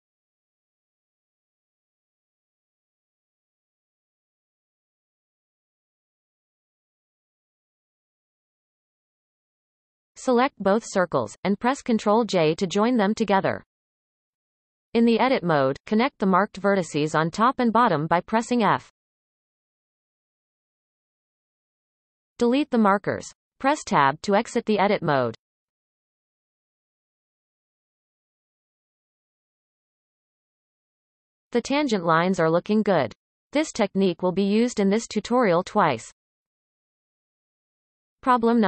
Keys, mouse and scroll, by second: 1.4 click, 2.1 shift+click, 2.5 x, 4.0 click, 4.4-5.3 shift+drag, 5.3 f, 5.8 click, 6.1 shift+click, 7.2 f, 9.5 Tab, 10.4 shift+click, 12.2 ctrl+j, 12.9 Tab, 13.6-15.0 shift+middle drag, 15.0 click, 16.3 shift+click, 17.2 f, 17.9-19.5 shift+middle drag, 19.5 click, 20.8 shift+click, 21.8 f, 22.7-23.9 shift+middle drag, 23.9 click, 24.6 shift+drag, 25.6 shift+click, 26.8-27.6 shift+middle drag, 27.6 shift+click, 28.2 shift+scroll down 1, 28.2-28.7 shift+middle drag, 28.7 x, 30.5 Tab, 31.4-34.5 shift+middle drag.